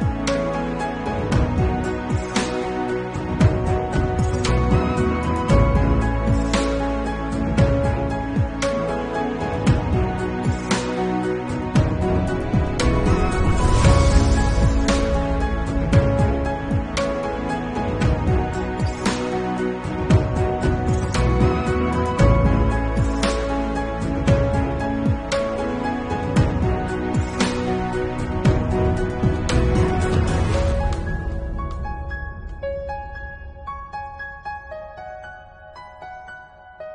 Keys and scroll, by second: 1.2 ctrl+alt+z, 3.3 Left, 3.8 Right, 4.1 Left, 6.4 Left, 7.8 ctrl+u, 8.9 ctrl+u, 13.8 0, 17.2 Right, 17.3 Left, 17.4 BackSpace, 17.6 7, 18.3 BackSpace, 18.3 8, 18.8 Return, 20.4-21.0 typing, 21.0 Return, 22.8 2, 23.5 ctrl+alt+z, 23.7 [, 25.6 Right, 26.3 Left, 26.4 Right, 26.7 ctrl+u, 31.4 Delete, 31.5-33.1 typing, 33.2 Return, 33.8 ctrl+alt+z, 35.3 ctrl+alt+z, 36.1 ctrl+alt+z, 36.5 ctrl+s.